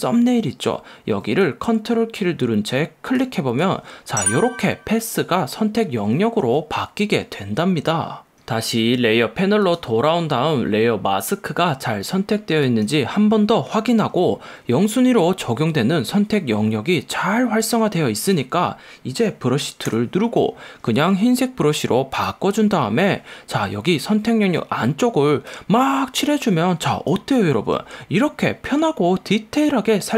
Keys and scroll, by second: 20.1 b.